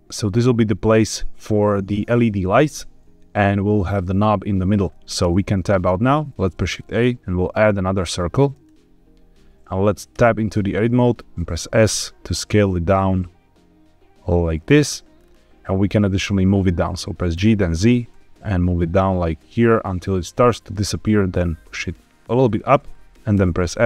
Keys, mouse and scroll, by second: 5.1 Tab, 6.2 shift+a, 10.1 Tab, 11.4 s, 14.6 click, 15.1-17.2 scroll up 2, 17.2 g, 17.6 z, 22.4 shift+click, 23.3 f.